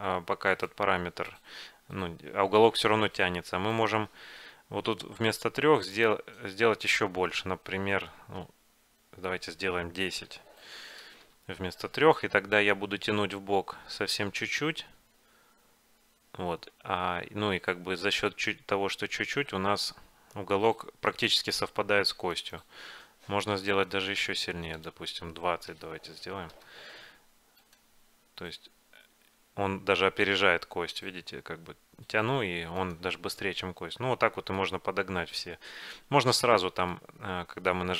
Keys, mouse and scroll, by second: 3.9-5.8 right drag, 6.0-8.1 drag, 12.7-14.3 right drag, 14.3 middle click, 15.1 g, 23.8-25.6 right drag, 24.9-26.9 drag, 27.8-29.5 right drag, 28.6 g, 33.6-37.5 middle drag.